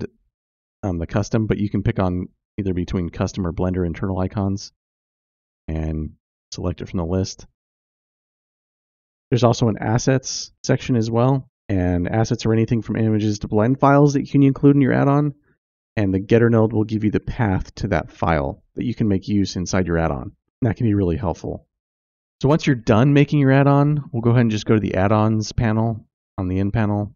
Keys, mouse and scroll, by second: 0.4 click, 1.0 click, 2.9 click, 3.4-4.2 drag, 10.0 click, 10.7 scroll down 2, 11.6 click, 13.1 scroll down 1, 20.0 scroll down 2, 21.2 click, 25.7 click.